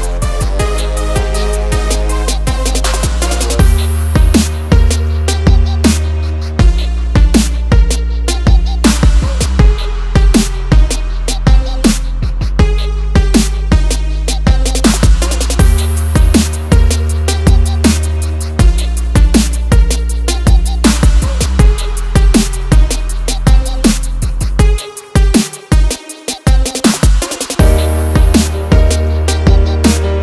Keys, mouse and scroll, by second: 0.5 click, 2.6 click, 3.5 F4, 4.6 click, 5.7 ctrl+o, 6.5 scroll down 1, 7.3 click, 7.9 click, 9.5 click, 11.6 F4, 12.9 F9, 14.3 click, 15.1 scroll up 1, 15.4 scroll down 1, 15.7-16.0 scroll up 1, 16.3 ctrl+click, 17.1 ctrl+click, 17.7 ctrl+click, 18.1-18.5 scroll down 1, 18.6 scroll up 1, 19.8 scroll down 1, 20.9 click, 21.1 scroll down 1, 21.3 scroll up 1, 21.8 scroll down 1, 22.0 click, 22.7 ctrl+o, 23.4 scroll down 1, 24.9 click, 28.2 F4, 28.5 click.